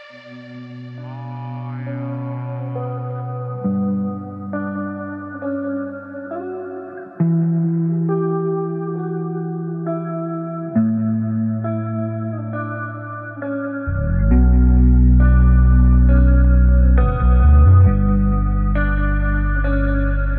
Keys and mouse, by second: 0.0 middle drag, 0.5 shift+middle drag, 0.9-1.3 middle drag, 1.4 space, 4.5-5.7 drag, 4.5 space, 5.3 KP_0, 7.1 click, 8.0 click, 8.3 space, 12.6 shift+click, 12.8 middle click, 13.3 shift+middle click, 13.5 middle click, 14.0-14.4 middle drag, 14.5 shift+middle drag, 14.8 middle drag, 15.3 shift+click, 15.4 shift+a, 17.8-19.4 drag, 19.5 shift+middle click, 19.9-20.3 drag.